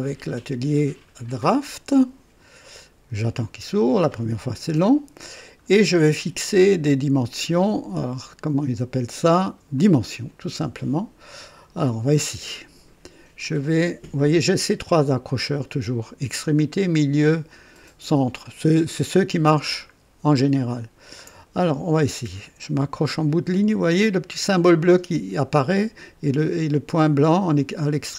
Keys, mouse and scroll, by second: 1.6 click, 9.7 click, 19.9-20.3 ctrl+scroll up 2, 20.8 scroll down 2.